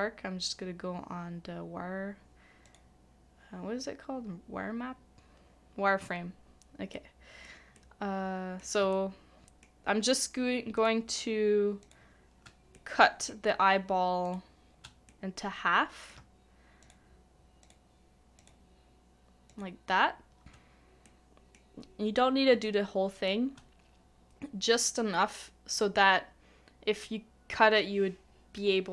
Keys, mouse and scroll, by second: 6.9 middle click, 8.9 shift+middle click, 10.7 shift+click, 11.8 shift+click, 12.7 middle click, 14.2 shift+click, 15.1 middle click, 16.8 shift+click, 17.6 shift+click, 18.4 shift+click, 19.5 shift+click, 21.0 middle click, 22.6 shift+middle click.